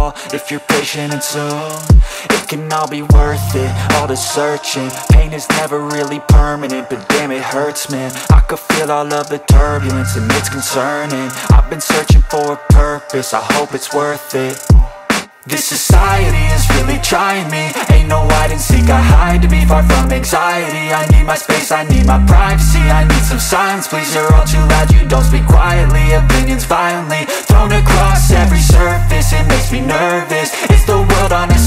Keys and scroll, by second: 12.2 Delete, 29.3 space.